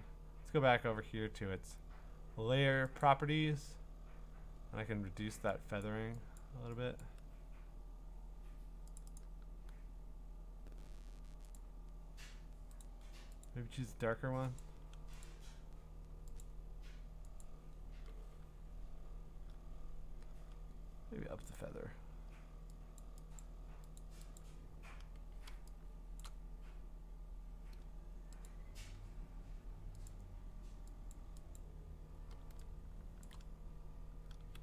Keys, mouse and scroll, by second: 3.0 click, 5.8 click, 6.4 click, 7.0 click, 9.0 click, 9.2 click, 11.6 click, 12.8 click, 13.5 click, 14.6 click, 15.2 click, 16.4 click, 17.4 click, 21.6 click, 23.0 click, 23.4 click, 24.0 click, 24.4 click, 26.2 click, 28.5 click, 29.2 click, 30.1 click, 31.6 click, 32.9-33.5 scroll, 33.3 click.